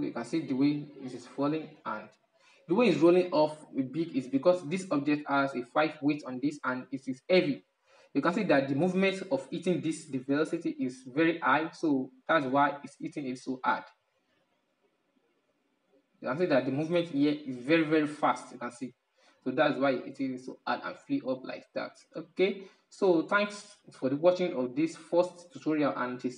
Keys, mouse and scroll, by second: 2.4-3.8 middle drag, 3.8 right click, 7.0-10.7 drag, 11.5-14.6 drag, 22.2-26.3 middle drag.